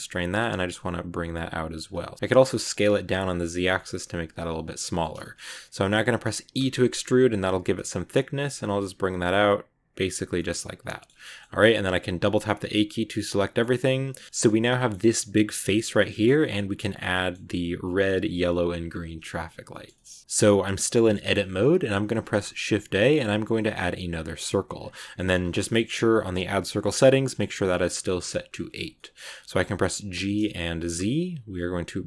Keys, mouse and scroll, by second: 1.9 scroll down 1, 2.0 middle click, 2.2 s, 4.6 scroll down 2, 4.7 middle click, 5.2-6.5 scroll up 2, 5.3 middle click, 6.5 e, 10.1 scroll down 2, 10.2-11.3 middle drag, 11.3 scroll down 2, 11.6 scroll up 2, 11.8 a, 12.0 a, 12.3 middle click, 13.1 scroll up 2, 13.3-14.4 middle drag, 14.4-14.7 scroll up 2, 14.7-20.2 middle drag, 20.2-20.8 scroll down 5, 20.8 middle click, 21.6 scroll up 3, 22.0 shift+a, 24.7 scroll down 1, 24.9 shift+middle click, 25.1 scroll up 2, 26.2-28.7 drag, 28.7 scroll down 2, 28.9-30.0 middle drag, 30.0 g.